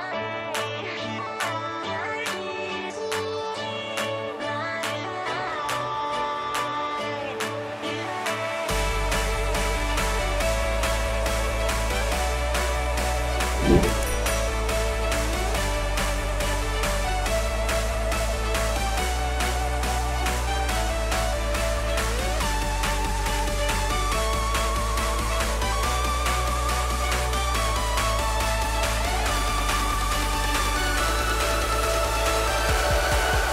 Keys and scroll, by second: 22.2 Delete, 28.8-30.0 typing.